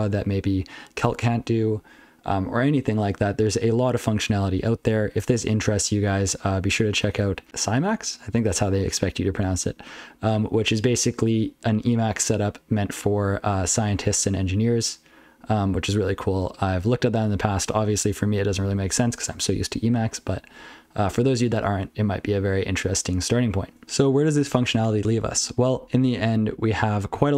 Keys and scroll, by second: 4.5 ctrl+n, 4.8 ctrl+n, 5.0 ctrl+n, 5.5 ctrl+l, 5.9 ctrl+n, 6.6 ctrl+l, 7.2 ctrl+f, 7.4 ctrl+f, 8.7 ctrl+p, 8.7-9.1 ctrl+f, 15.3 ctrl+a, 15.7 ctrl+n, 15.9 ctrl+n, 16.3 ctrl+n, 16.7 ctrl+p, 16.9 ctrl+n, 17.2 ctrl+p, 17.4 ctrl+p, 18.7 ctrl+n, 20.1 ctrl+f, 20.3 ctrl+f, 20.5 ctrl+f, 20.7 ctrl+f, 21.1 ctrl+f.